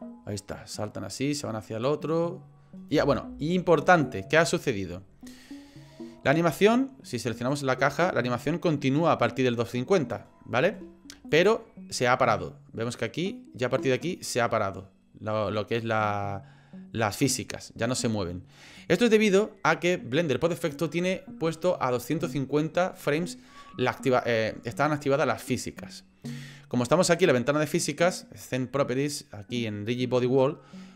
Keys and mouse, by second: 3.0 space, 4.0 click, 6.6 click, 7.4 click, 8.0-10.1 drag, 11.3-18.8 drag.